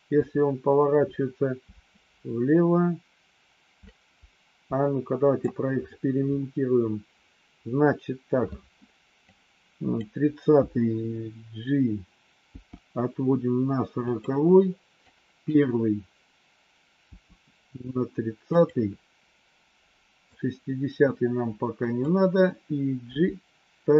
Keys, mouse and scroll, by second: 9.2 click, 12.4 g, 14.9 click, 17.0 g, 20.3-22.0 drag, 23.0 g.